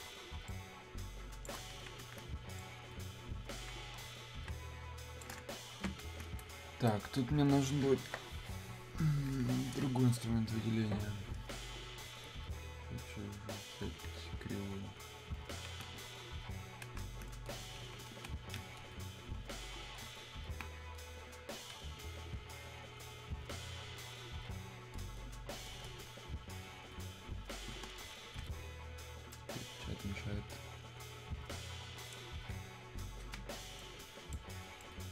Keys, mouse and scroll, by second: 0.5-2.6 ctrl+shift+drag, 2.6-4.5 ctrl+drag, 4.5 ctrl+space, 11.9 click, 16.9 Escape, 20.5 Escape, 21.1 click, 27.7 ctrl+Escape, 29.3-35.1 ctrl+drag.